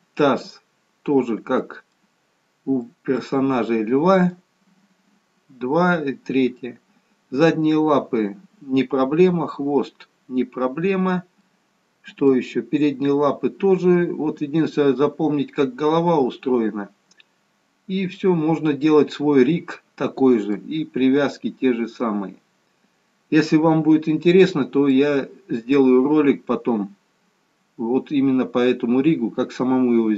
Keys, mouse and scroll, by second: 1.8 middle click, 3.0 middle click, 6.8 middle click, 8.6-9.8 scroll down 2, 11.6 middle click, 13.7-14.1 scroll up 1, 14.1-14.6 scroll down 1, 18.3 middle click, 25.1 middle click.